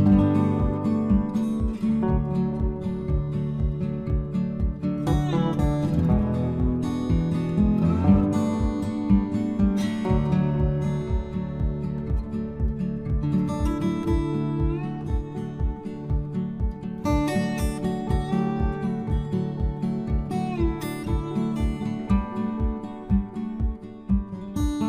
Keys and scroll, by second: 0.5 ctrl+c, 18.8 Delete.